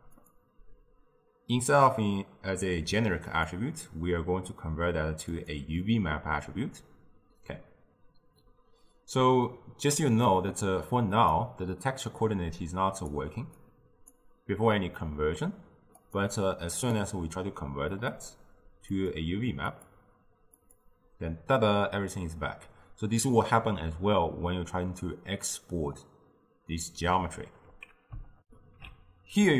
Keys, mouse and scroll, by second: 12.2 drag, 13.7-19.2 drag, 28.4 ctrl+alt+shift+w.